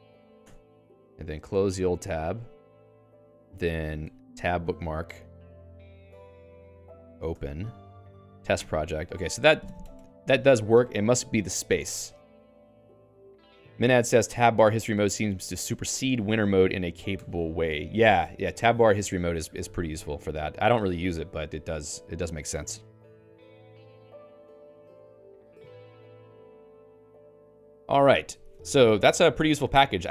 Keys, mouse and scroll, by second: 0.4 Return, 2.2 click, 2.3 click, 3.1 alt+x, 3.2 alt+click, 4.1 alt+x, 5.6-7.0 typing, 7.1 ctrl+j, 7.3 Return, 8.2 ctrl+j.